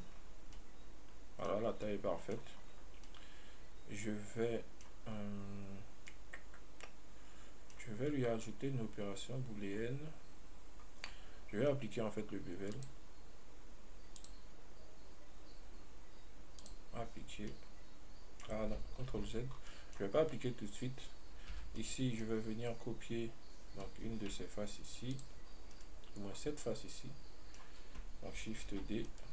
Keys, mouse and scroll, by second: 0.0 click, 0.4-0.8 scroll up 3, 0.8-1.9 middle drag, 1.9 scroll down 1, 2.1-2.8 middle drag, 2.8-3.1 scroll up 1, 3.4-5.4 middle drag, 5.4 scroll down 2, 6.4-9.4 middle drag, 9.6 scroll up 1, 13.0 click, 14.4 click, 16.9 click, 17.8-19.4 middle drag, 19.4 ctrl+z, 19.8 scroll down 1, 20.0-20.8 middle drag, 20.8-21.3 scroll up 3, 21.8 Tab, 22.0-25.1 middle drag, 25.4 click, 26.0 right click, 26.9-28.9 middle drag, 28.9 shift+d.